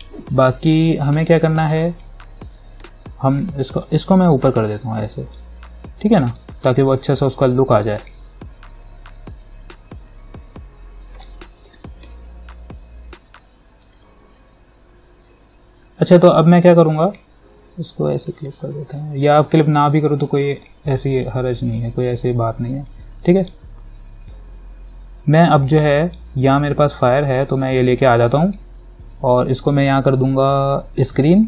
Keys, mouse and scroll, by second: 1.4 click, 4.3-9.9 drag, 11.9 ctrl+=, 15.5 click, 18.5 alt+click, 25.9-31.4 drag.